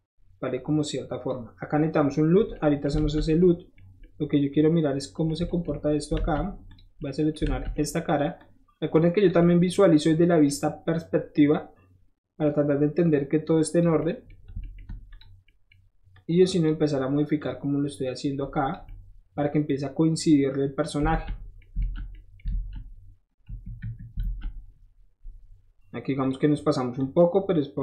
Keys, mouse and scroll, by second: 2.3 middle click, 3.0 alt+z, 6.2 alt+shift+z, 6.7 click, 7.4 alt+z, 8.4 click, 13.1 click, 15.1 shift+click, 16.1 shift+click, 17.4 click, 18.1 click, 21.1 alt+z, 21.8 alt+z, 22.5 alt+z, 23.4 KP_1, 23.8 KP_3, 24.2 alt+z, 26.2 click, 27.0-27.8 drag.